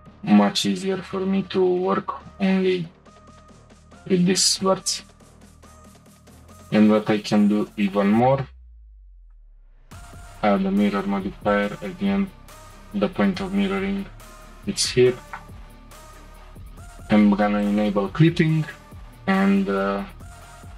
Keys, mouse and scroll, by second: 3.6 click, 4.5 click, 5.8 Tab, 6.1 click, 6.6 click, 7.0 click, 7.3 click, 7.7 click, 7.8 click, 8.2 click, 8.3 click, 9.2 click, 9.4-11.6 drag, 13.4-13.7 scroll down 2, 13.7-14.8 shift+middle drag, 14.8 click, 15.8-16.1 scroll up 3, 16.1 Tab, 17.6 click, 18.4 shift+middle click, 18.8-19.1 scroll down 2, 19.8 g.